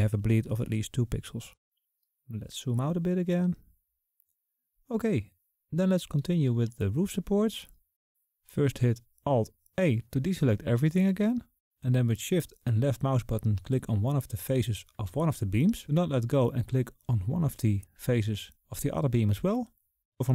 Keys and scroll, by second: 10.6 alt+a.